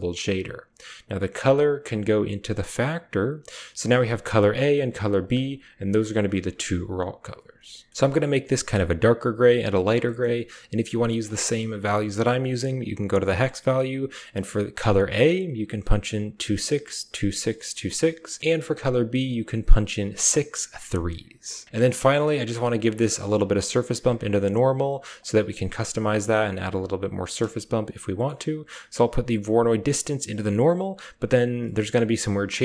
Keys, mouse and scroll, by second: 1.7-2.6 drag, 9.9 middle drag, 11.0 drag, 12.2 click, 21.8 click, 22.3 click, 22.9 click, 24.1 drag, 24.6 click, 25.0-25.6 drag, 25.9 click, 26.3 click, 28.4-29.4 typing, 28.8 click, 29.6-30.8 drag, 30.5-31.7 typing, 30.8-32.6 middle drag.